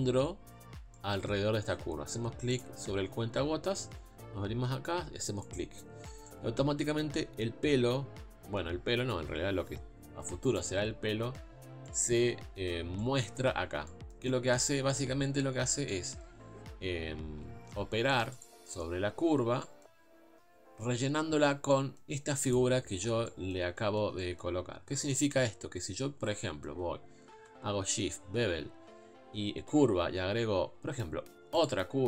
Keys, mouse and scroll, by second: 3.2 click, 18.4 z, 22.6 click.